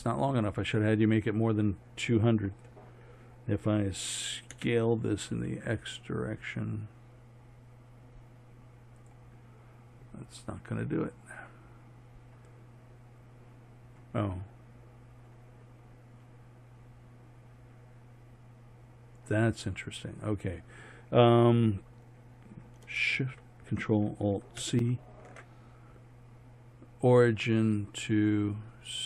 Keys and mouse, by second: 4.6 s, 13.0-14.2 middle drag, 15.8-18.4 middle drag, 19.3-23.7 middle drag, 24.6 ctrl+alt+shift+c.